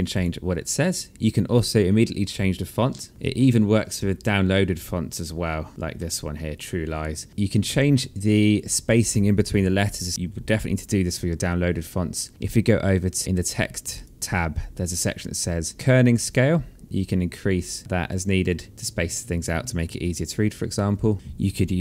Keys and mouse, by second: 3.1 alt+click, 5.9 alt+middle click, 13.8 click, 16.2 click, 18.0 alt+middle click, 19.1 alt+click, 19.5 alt+middle click, 19.9 alt+click, 20.6 alt+middle click, 21.1 alt+click.